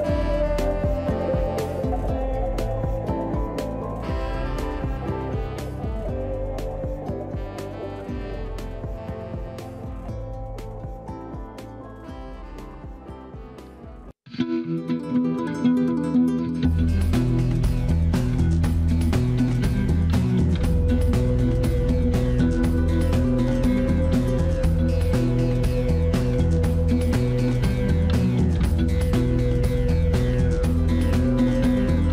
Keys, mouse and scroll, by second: 0.3-2.7 drag, 3.4-4.7 middle drag, 4.7 x, 6.2-8.3 middle drag, 8.3-10.6 drag, 11.8-14.0 middle drag, 14.0-15.1 drag, 16.8 ctrl+click, 17.7-19.4 middle drag, 19.4 shift+click, 20.6 ctrl+click, 22.1 x, 23.9-26.1 middle drag, 26.1-26.5 scroll up 1, 26.5-27.6 shift+middle drag, 27.6-28.7 drag, 29.5 shift+click, 30.9 f.